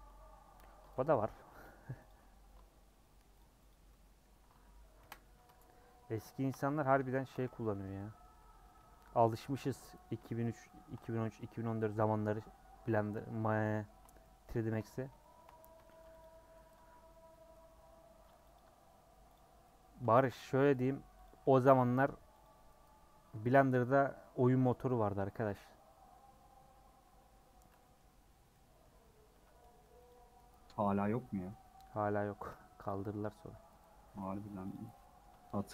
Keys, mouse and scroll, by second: 0.0 Tab, 0.3 Tab, 0.7 Tab, 1.6 h, 2.0 click, 2.2 h, 2.5-3.7 scroll down 5, 3.7 click, 3.9-5.0 middle drag, 5.0 KP_Decimal, 5.5 Tab, 5.9 Tab, 6.3 shift+middle click, 6.5 scroll up 1, 7.1 shift+middle click, 7.7 /, 7.9 middle click, 8.5 Tab, 8.8-9.1 scroll up 1, 9.2 middle click, 10.2-13.3 shift+middle drag, 13.3 scroll up 2, 13.6-14.8 shift+middle drag, 14.8-15.2 scroll up 1, 15.2 shift+middle click, 15.9 2, 16.2 alt+click, 17.5-18.5 middle drag, 18.5 alt+click, 19.5 scroll down 1, 19.7-20.8 middle drag, 20.8 alt+click, 21.2 alt+click, 22.4 alt+click, 23.0 scroll down 4, 23.3-24.5 middle drag, 24.5 a, 25.6 u, 27.5-28.5 scroll up 3, 27.8 middle click, 28.5-30.1 middle drag, 30.1 alt+click, 30.7 scroll down 1, 31.0-32.0 middle drag, 32.0 scroll up 1, 32.8 alt+click, 33.4 middle click, 33.9 middle click, 34.7 click, 35.0-35.7 middle drag.